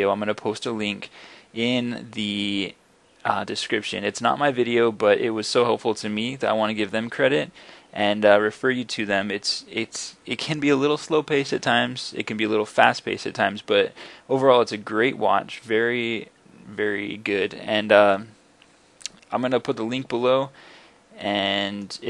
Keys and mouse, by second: 20.5-21.3 middle drag, 21.5 middle drag, 21.8-22.0 middle drag.